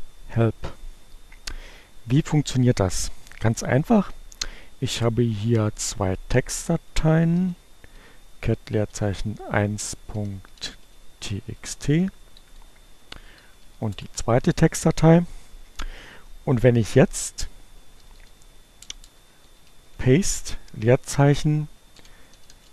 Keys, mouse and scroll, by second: 5.4 c, 7.1 a, 7.5 space, 7.9 1, 9.6-10.8 typing, 11.1 Return, 11.7 Left, 13.6 2, 14.3 Return, 17.4-22.7 typing.